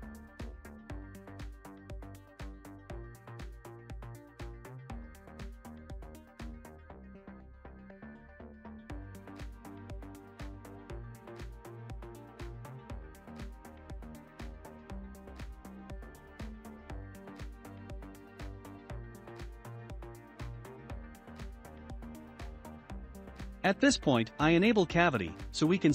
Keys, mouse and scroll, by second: 0.7 s, 5.6 ctrl+a, 6.9-9.1 shift+middle drag, 9.1-9.5 scroll up 2, 10.0-13.0 drag, 10.0 scroll up 1, 14.8-15.8 shift+middle drag, 15.8-18.8 drag, 19.1-20.1 shift+middle drag, 20.1 click, 20.6-22.6 shift+middle drag, 22.6-25.9 drag.